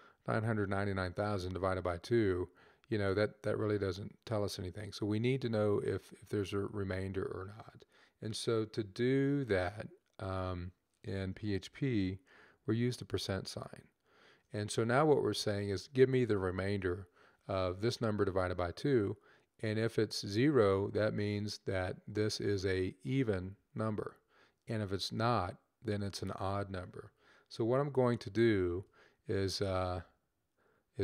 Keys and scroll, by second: 13.1 shift+5.